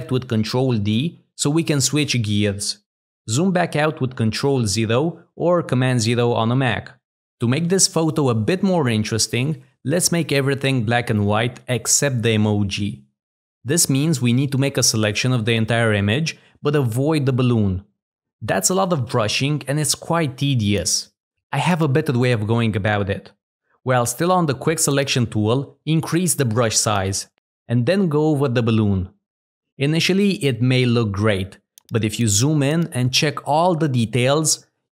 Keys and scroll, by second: 31.6 z.